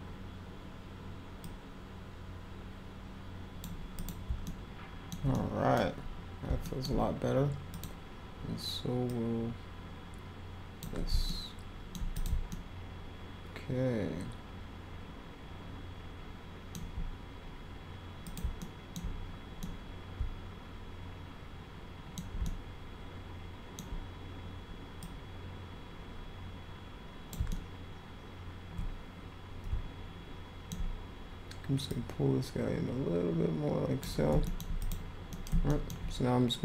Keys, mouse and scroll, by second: 1.4-3.6 drag, 4.0 click, 4.4-5.1 alt+middle drag, 5.3 middle click, 5.7 scroll down 2, 6.0 scroll up 2, 6.6 alt+middle click, 7.7 click, 9.1-10.8 drag, 11.2 alt+middle click, 12.1 click, 12.5-16.7 alt+middle drag, 18.2 click, 18.6 alt+middle click, 19.6-22.2 middle drag, 22.4-23.7 alt+middle drag, 25.0-27.3 drag, 27.5-30.7 alt+middle drag, 31.9-34.0 drag, 34.4 alt+middle click, 34.8 click, 35.3 middle click, 35.7 alt+middle click.